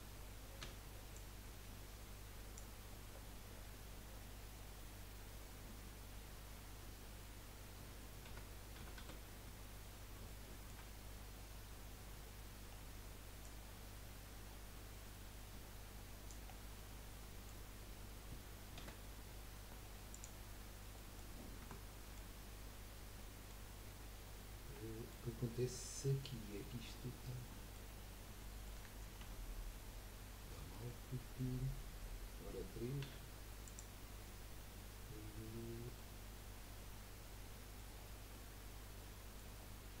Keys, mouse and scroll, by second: 0.6 b, 3.1-3.8 scroll down 10, 4.8 scroll down 3, 5.3 scroll up 1, 8.3 a, 8.8 a, 9.0 a, 9.9 scroll up 2, 10.4 shift+middle click, 10.9 scroll up 1, 11.7 scroll down 1, 12.5-13.1 scroll up 5, 13.4 click, 16.6 scroll down 4, 16.7-18.9 middle drag, 18.9 z, 20.9 middle click, 21.3 scroll up 3, 21.6 Tab, 22.0-23.7 middle drag, 23.7-24.7 scroll up 2, 24.7-27.9 middle drag, 27.9-28.4 scroll up 1, 28.4 shift+middle click, 29.2 Tab, 30.1-30.5 scroll up 1, 30.5-33.0 shift+middle drag, 33.0 3, 33.6 click, 34.2-36.2 middle drag, 36.2-36.6 scroll up 2, 36.6-38.0 middle drag, 38.0-38.5 scroll down 3, 38.5-39.6 middle drag, 39.6-40.0 scroll up 1.